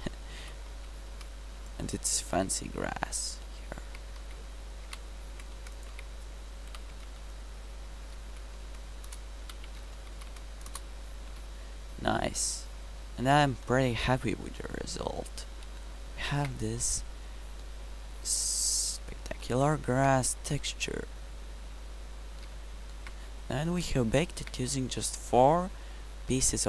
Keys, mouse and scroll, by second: 0.4 g, 2.9-3.3 middle drag, 4.0 Tab, 4.2 s, 6.0 Tab, 6.7 g, 9.5 g, 11.3 KP_Decimal, 18.1 middle click, 18.8 middle click, 19.1 middle drag, 20.0-21.1 middle drag, 21.1 middle click, 21.4-22.0 middle drag, 22.2 middle click, 22.7 middle drag, 23.2 middle drag, 23.8 middle drag.